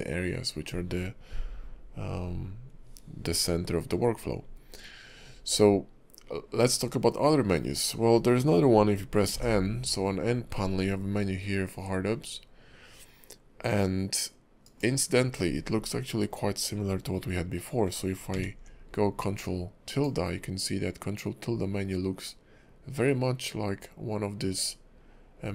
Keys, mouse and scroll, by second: 9.3 n, 14.6 click, 18.3 ctrl+`.